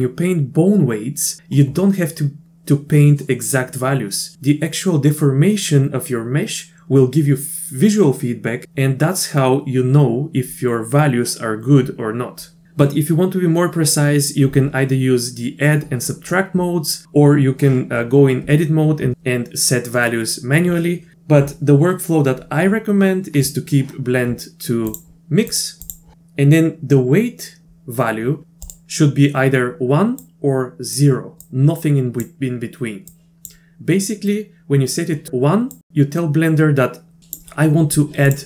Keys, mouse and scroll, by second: 24.9 click, 25.5 click, 28.4 click, 30.3 click, 31.4 click, 33.1 click, 37.2 click, 38.3 click.